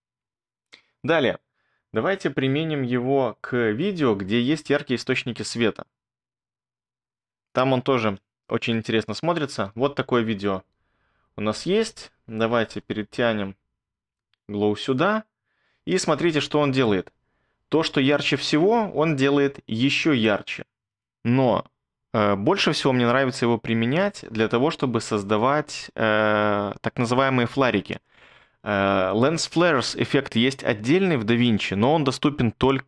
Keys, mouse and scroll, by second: 8.1 BackSpace, 9.7 space, 11.8 space.